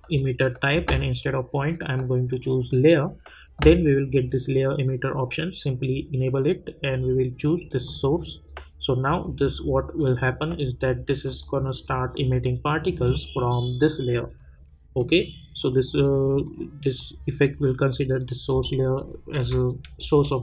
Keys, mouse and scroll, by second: 11.2 click, 19.4 space.